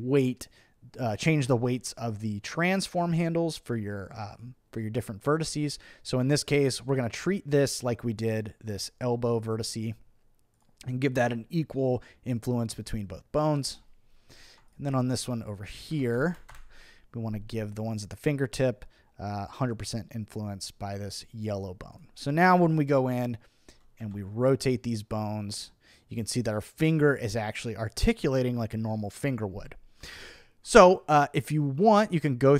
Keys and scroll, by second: 15.9 1, 16.2 0, 16.5 Return, 24.0 v, 30.0 super+z.